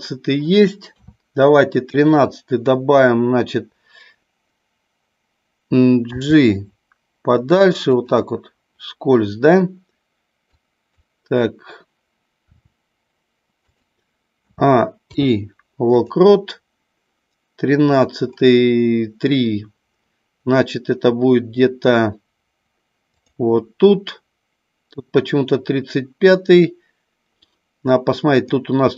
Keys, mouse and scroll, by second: 0.8 KP_3, 1.9 click, 6.2 g, 7.8 click, 10.7 click, 12.4 r, 13.6 click, 14.4 a, 14.9 i, 23.2 click, 28.4 click.